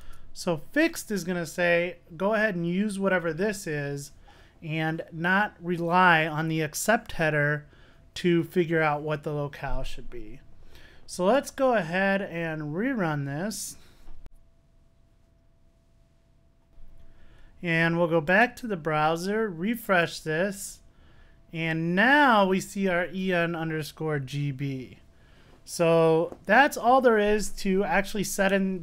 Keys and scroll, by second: 0.1 Return, 2.8 super+s, 11.6 super+r.